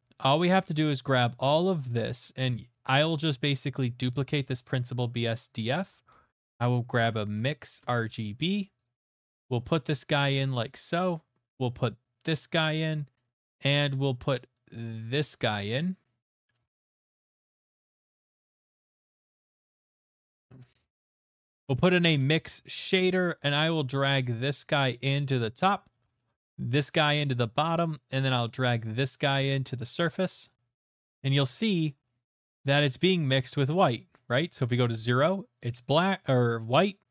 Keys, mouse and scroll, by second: 0.3 middle click, 0.3 shift+middle click, 1.1 click, 1.7 middle click, 2.7 click, 2.9 click, 3.7 click, 3.7 middle click, 4.3 d, 5.4 click, 5.8 middle click, 6.2 middle click, 7.0 click, 7.0-7.3 typing, 7.8 Return, 9.0 click, 9.3 click, 10.9 click, 12.3 click, 13.7 click, 16.5 scroll, 17.0 middle click, 17.8 middle click, 19.2 middle click, 19.7 middle click, 20.0 click, 20.1-21.9 typing, 20.4 click, 20.8 click, 22.1 Return, 22.8 click, 23.3 middle click, 25.9 click, 26.1 middle click, 27.6 click, 29.7 click, 31.7 middle click, 32.1 middle click, 32.9 middle click.